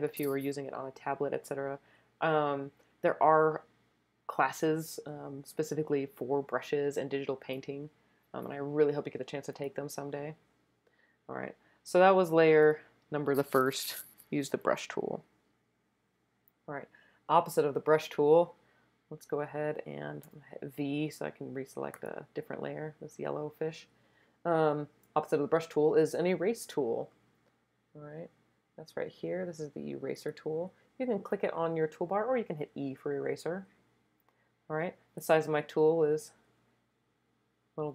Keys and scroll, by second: 20.3 v, 35.4-36.2 typing.